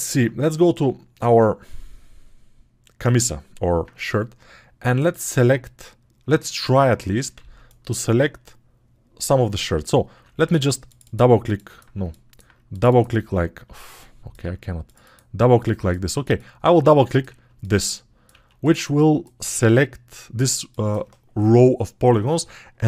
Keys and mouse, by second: 7.0-20.0 alt+right drag.